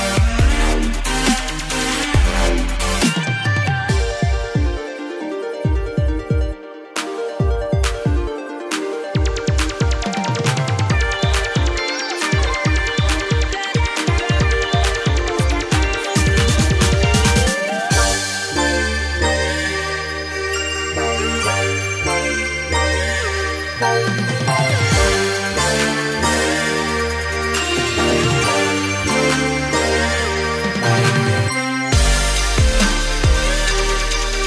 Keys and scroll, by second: 24.7-25.5 typing, 26.3 ctrl+[, 28.1 ctrl+-.